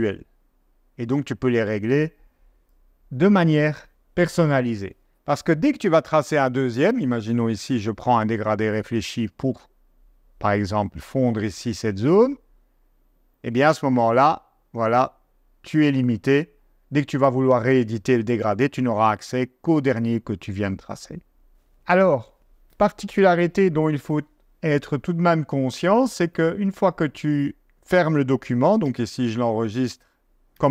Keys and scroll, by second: 28.8 super+s, 30.5 super+s.